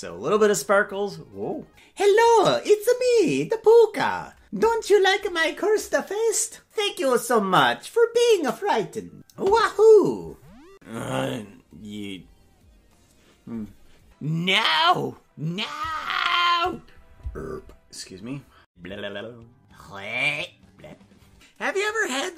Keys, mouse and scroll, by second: 16.8 right click, 17.2-17.8 scroll down 6.